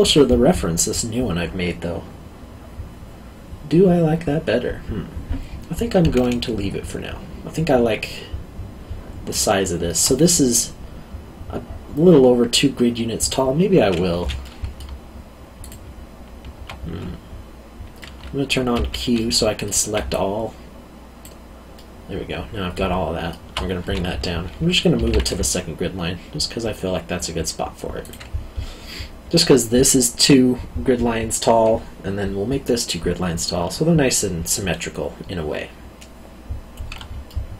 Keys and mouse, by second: 9.6 alt+middle click, 14.2 3, 14.4 middle click, 15.6 alt+click, 18.0 middle click, 18.7 q, 19.2 middle click, 20.1 click, 21.7 middle click, 25.0 g, 25.0 z, 28.0 click, 37.2 alt+middle click.